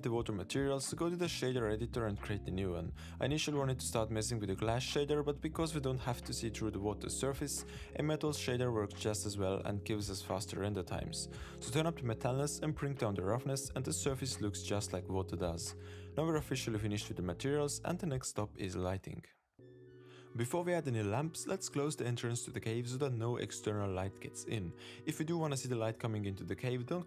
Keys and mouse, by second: 0.1 super+s, 2.6 click, 4.0-5.1 drag, 5.1 shift+a, 6.5 middle click, 8.2 z, 11.2-12.9 drag, 13.5-15.4 drag, 19.5 shift+click, 19.7 super+s, 20.0 z, 21.2 middle click, 21.5 middle click, 21.7 shift+middle click, 21.9 middle click, 22.1 middle drag, 22.3 shift+a, 22.4 shift+a, 23.9 r, 25.0 g, 25.6 middle drag, 25.9 s, 26.4 g.